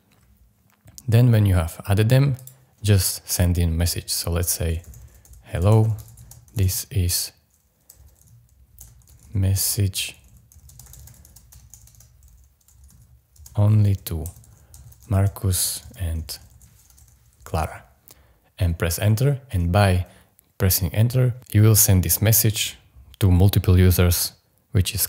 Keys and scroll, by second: 4.5-18.1 typing, 19.5 Return.